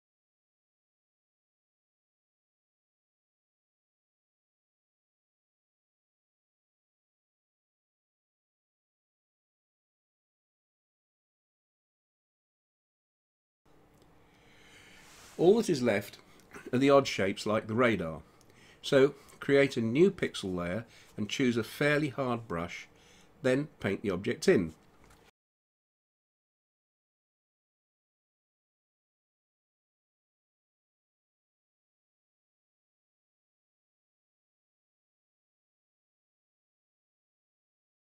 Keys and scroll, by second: 7.4 space.